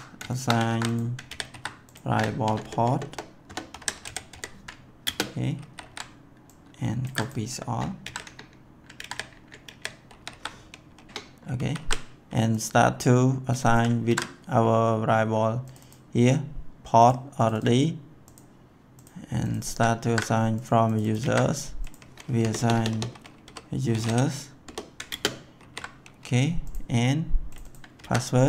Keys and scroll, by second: 0.7 ctrl+c, 1.2 ctrl+v, 1.5 ctrl+s, 2.4 BackSpace, 3.4-4.7 typing, 5.0 ctrl+space, 5.5 ctrl+s, 7.0 ctrl+c, 8.0 ctrl+v, 9.2 Return, 9.6 ctrl+v, 10.0 ctrl+s, 11.1 Return, 11.5 ctrl+s, 14.0 ctrl+c, 20.0 ctrl+c, 22.3 ctrl+v, 22.4-24.6 typing, 25.0 ctrl+space, 25.6 ctrl+s, 27.9 ctrl+c.